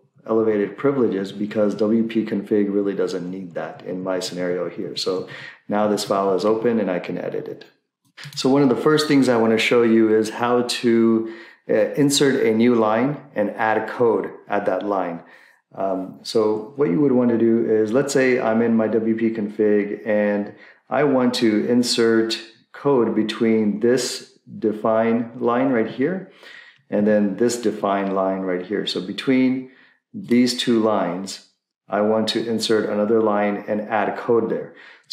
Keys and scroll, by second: 0.0 Up, 2.9 Up, 3.7 Up, 5.1 Up, 6.1 Up, 27.0 Down.